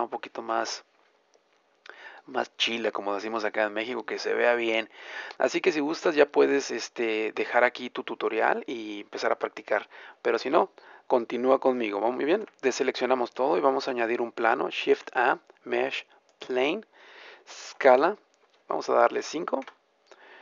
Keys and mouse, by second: 5.1 middle click, 5.2-7.1 drag, 5.2-7.1 right drag, 7.1 middle click, 7.2-12.2 right drag, 12.2 a, 12.9 middle click, 14.7 shift+a, 17.9 s.